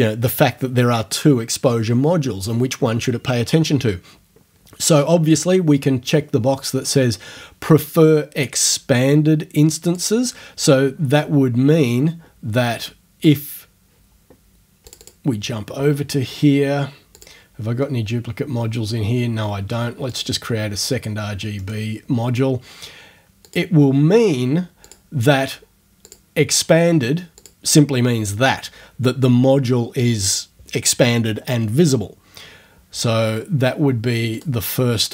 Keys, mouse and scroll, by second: 9.9 click, 11.2 click, 13.3 click, 14.9 click, 17.2 click, 20.2 click, 21.6 middle click, 23.5 click, 24.8 click, 26.1 click, 27.4 click, 34.4 click.